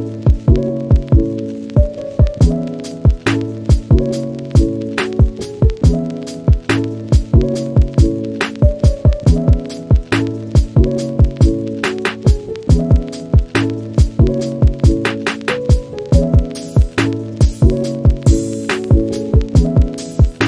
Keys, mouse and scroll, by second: 0.6 click, 2.4 click, 3.3 ctrl+z, 5.3 click, 8.1-10.0 middle drag, 14.2 click, 14.6-14.9 middle drag, 15.2 shift+middle drag, 15.4-17.1 scroll up 1, 17.1 click.